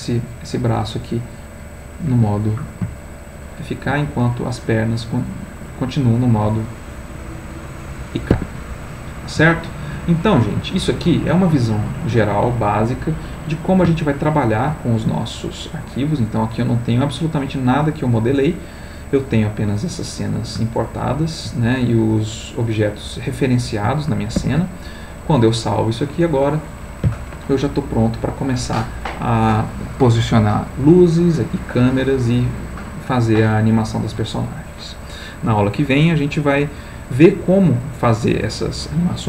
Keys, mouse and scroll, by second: 2.0 Escape, 2.9-4.2 shift+middle drag, 5.0 click, 6.4 g, 8.3 Escape, 8.8 middle click, 9.9 ctrl+middle click, 10.7 ctrl+shift+middle click, 11.6-17.8 ctrl+shift+middle drag, 21.8-23.3 ctrl+middle drag, 24.4 ctrl+s, 27.4-28.7 middle drag.